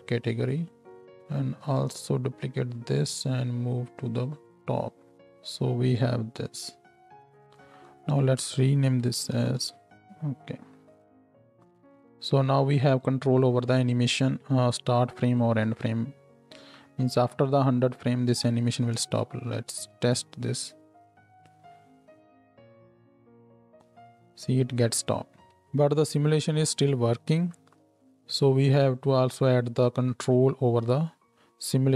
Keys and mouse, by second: 0.5-1.8 middle drag, 1.8-2.9 drag, 2.9-5.1 middle drag, 5.1 Tab, 5.1-6.4 drag, 5.1 n, 6.4-8.9 middle drag, 9.9 l, 9.9 f, 10.4-12.1 drag, 12.1-15.8 middle drag, 15.8-31.9 drag, 19.1 shift+Left, 19.6 space, 25.3 space.